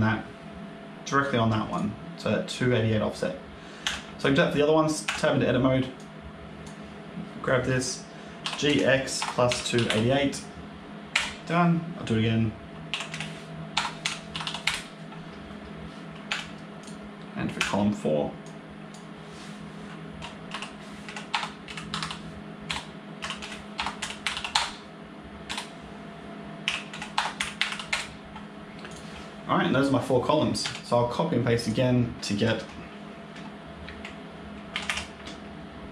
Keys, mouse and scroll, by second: 1.6 click, 3.7 Tab, 4.1 click, 4.9 Tab, 5.9 click, 8.3 g, 12.8 g, 16.2 Tab, 16.7 click, 17.5 Tab, 18.3 click, 20.4 g, 23.1 g, 26.5 g, 28.8 click, 30.5 Tab, 30.8 click, 31.5 click, 34.6 ctrl+c, 34.7 ctrl+v.